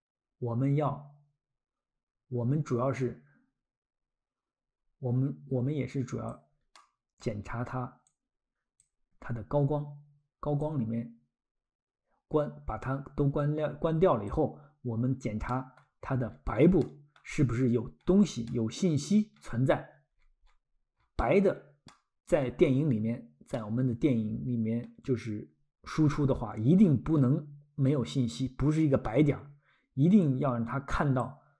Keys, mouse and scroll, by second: 6.8 middle click, 8.1 click, 9.2 scroll, 10.6 click, 15.5 middle click, 16.0-16.6 scroll, 16.8 middle click, 17.5 scroll, 18.5 middle click, 19.0-19.6 scroll, 21.9 middle click, 22.7-23.5 scroll, 23.5 middle click, 26.4-26.7 scroll, 29.2-30.0 scroll, 30.2 click.